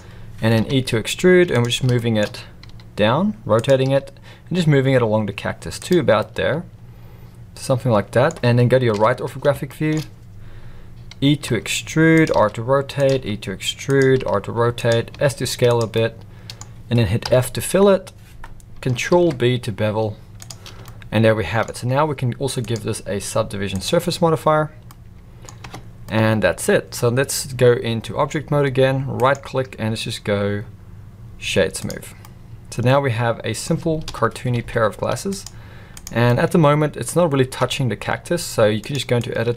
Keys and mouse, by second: 0.6 e, 2.0 shift+middle click, 2.7 r, 3.8 g, 6.2-8.2 middle drag, 8.9 KP_3, 9.6 shift+middle click, 11.4 e, 12.3 r, 13.1 e, 14.2 r, 15.1 s, 15.9-16.6 middle drag, 17.2 f, 19.1 ctrl+b, 20.8 middle click, 22.6-23.9 drag, 24.8 middle click, 25.6 Tab, 26.0-26.9 middle drag, 29.2-31.9 right drag, 32.2-33.6 middle drag, 34.0 KP_1, 34.5 alt+a, 36.2-37.0 middle drag, 37.6 Tab, 38.1 z, 39.3 click.